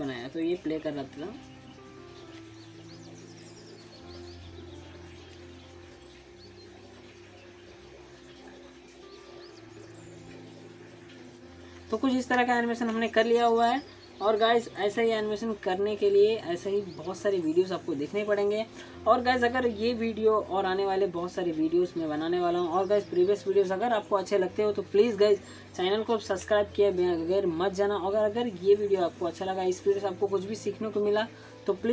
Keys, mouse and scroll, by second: 0.3 alt+click, 0.7-1.9 alt+middle click, 1.3-2.9 alt+drag, 6.0-6.6 alt+drag, 17.2 click, 18.8 alt+scroll up 1, 19.0 alt+click, 19.5 alt+middle click, 19.8 alt+click, 20.2-20.8 alt+middle drag.